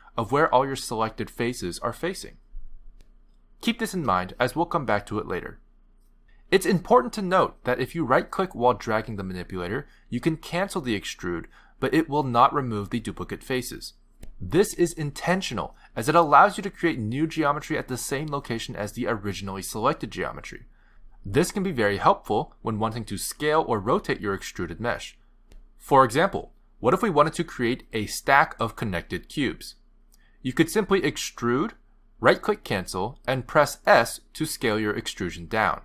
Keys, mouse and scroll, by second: 0.8 middle click, 4.3 middle click, 5.3 middle click, 9.1 middle click, 9.9 click, 10.4 middle click, 11.4 click, 16.2 click, 17.7 click, 28.8 click, 30.1 click, 31.2 click, 32.8 s.